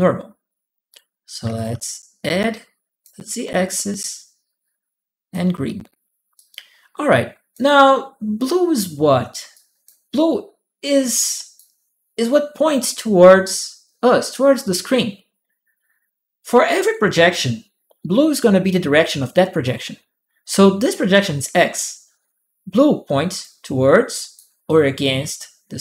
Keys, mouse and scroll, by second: 1.2 a, 1.3 click, 1.4 a, 2.0 click, 3.9-5.1 drag, 6.2-7.3 drag, 9.3 click, 11.1 click, 23.2 click, 24.5-25.8 drag.